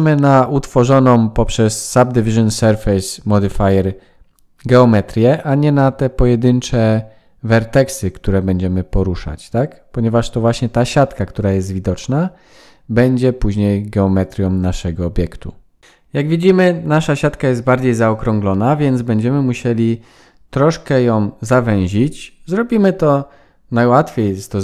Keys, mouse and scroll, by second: 0.8-1.3 scroll down 4, 1.2-1.7 scroll up 4, 1.7 click, 2.1 g, 3.8 click, 4.3 g, 6.2-6.6 scroll down 4, 6.6-7.5 scroll up 4, 7.5 click, 7.9 g, 9.2 click, 9.5 g, 10.5 scroll down 3, 10.9 shift+middle click, 11.3-11.8 scroll up 4, 11.8 shift+middle click, 12.3 click, 13.2 g, 14.2 click, 14.8 g, 15.8 shift+middle click, 15.8 scroll up 6.